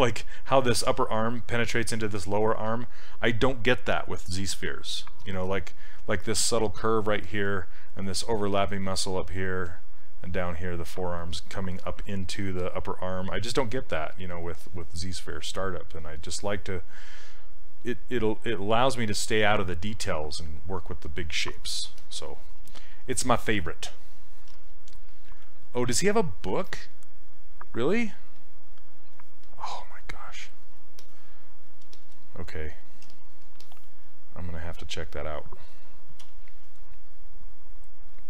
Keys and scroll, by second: 22.6 s, 24.5 s, 33.1 s, 36.3 z.